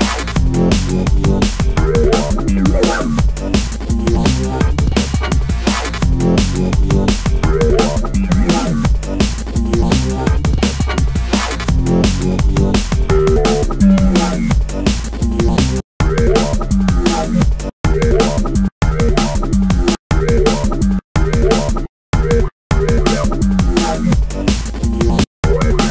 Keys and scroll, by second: 14.9 space, 16.4 b, 16.8 space, 19.1 space, 24.4 space.